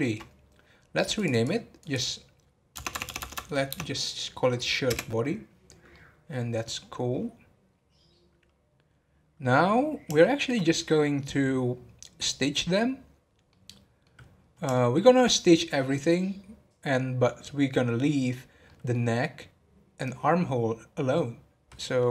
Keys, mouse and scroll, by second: 1.1-2.9 drag, 2.9 BackSpace, 3.0 BackSpace, 5.9-13.2 middle drag, 13.7-14.2 middle drag, 14.2 scroll up 1, 14.7-17.7 shift+middle drag, 18.7-22.1 middle drag.